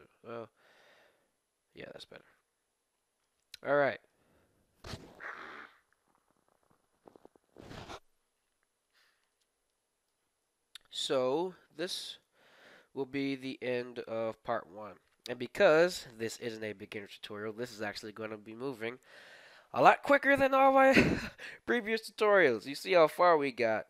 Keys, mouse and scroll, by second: 2.1-4.1 middle drag, 9.0-11.0 middle drag, 11.0 KP_1, 11.4-12.8 middle drag, 13.4 KP_1, 14.0-15.2 middle drag, 15.4 middle click.